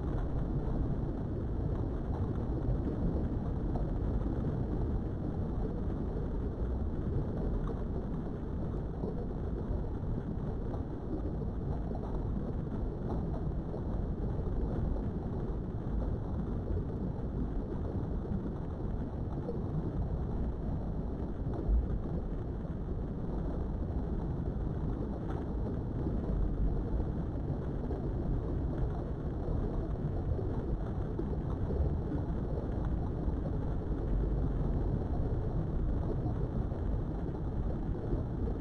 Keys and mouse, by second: 0.8 click, 1.2-3.6 middle drag, 5.4 g, 6.0 x, 7.3 click, 8.1 Tab, 8.4-12.0 middle drag, 12.7-14.3 middle drag, 14.4 Tab, 14.9-15.9 middle drag, 17.5 middle click, 17.8 Tab, 18.2 middle click, 20.0 middle click, 21.3-23.9 middle drag, 24.3 Tab, 24.8 shift+middle click, 25.3 Tab, 26.0 KP_3, 26.9 shift+middle click, 28.3 Tab, 32.1 click, 33.6 shift+click, 34.4 alt+shift+click, 35.1 shift+middle click, 35.5 ctrl+z, 36.8 shift+click, 37.4 shift+click, 38.2 shift+click.